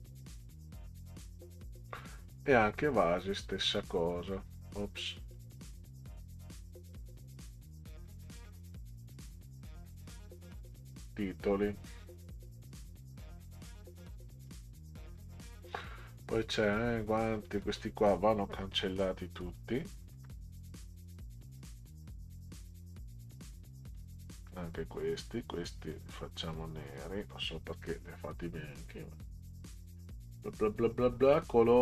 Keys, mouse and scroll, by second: 0.4 click, 3.5-4.6 drag, 5.4 click, 6.9-9.1 drag, 10.7 click, 14.4 click, 17.4-19.5 drag, 20.1 Delete, 21.6-23.9 drag, 24.4 Delete, 25.9-27.3 drag, 29.6 click.